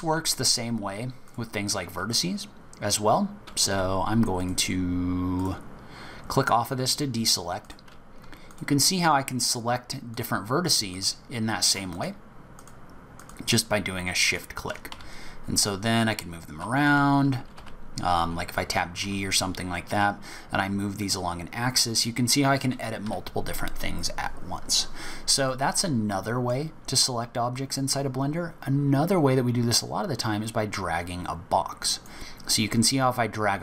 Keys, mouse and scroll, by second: 1.2 click, 3.7 Escape, 4.4 right click, 5.4 click, 7.6 click, 8.5 shift+click, 9.5 shift+click, 10.1 shift+click, 10.9 shift+click, 11.9 shift+click, 12.6 shift+click, 13.1 shift+click, 14.2 shift+click, 14.9 s, 25.5 middle click, 30.4 click.